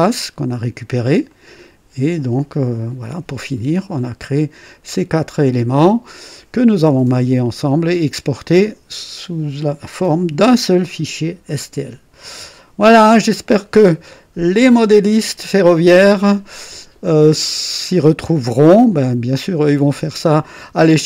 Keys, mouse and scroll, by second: 1.2 click, 3.7-4.6 right drag, 14.1-14.9 right drag.